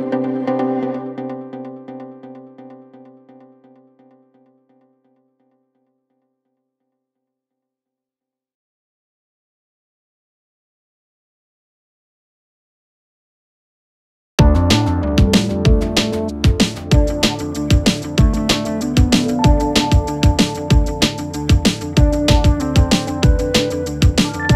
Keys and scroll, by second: 7.4 3, 7.8 ], 10.5 ], 12.5 ], 15.0 ctrl+z, 18.1 4, 23.0 3, 23.3 ].